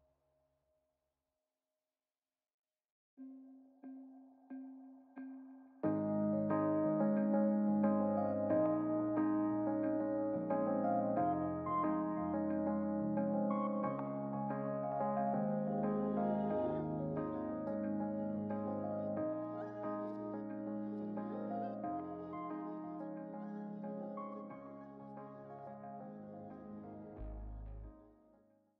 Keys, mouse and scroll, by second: 1.9-3.4 scroll up 4, 5.9-6.6 drag, 7.2-7.7 drag, 8.4-11.9 drag, 12.5-13.0 middle drag, 13.5-14.2 middle drag, 14.4-15.1 scroll up 2, 15.1-15.7 middle drag, 17.2-18.7 drag, 19.2-20.6 drag, 21.0-24.7 drag, 25.1-25.4 scroll down 2, 25.4-26.0 middle drag, 26.4-27.0 scroll down 5, 27.0 middle drag, 27.7 ctrl+shift+click, 28.4 middle click.